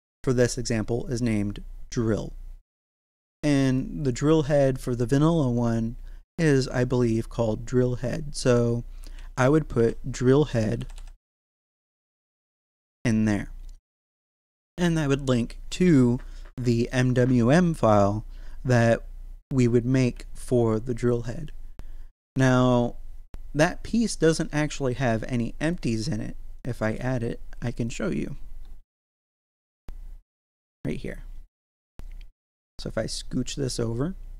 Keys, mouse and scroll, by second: 3.6 click, 6.6 click, 9.2-12.6 typing, 13.3 click, 24.6 click, 28.2-30.5 scroll down 4, 30.6 click, 31.6-32.0 scroll down 1, 32.5 g, 32.6 x.